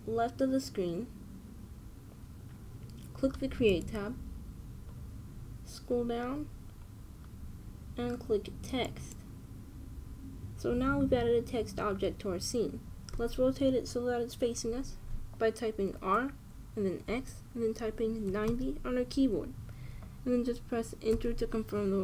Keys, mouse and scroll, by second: 4.4-6.3 drag, 6.6-9.4 middle drag, 9.6-11.5 drag, 16.6 r.